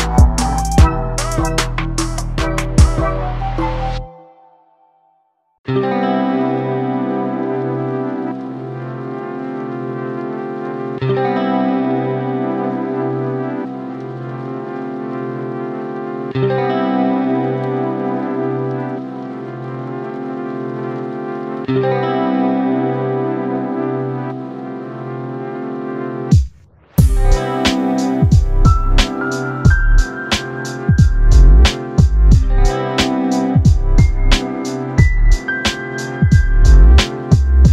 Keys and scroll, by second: 14.4 ctrl+t, 24.4 ctrl+t, 30.9 ctrl+t.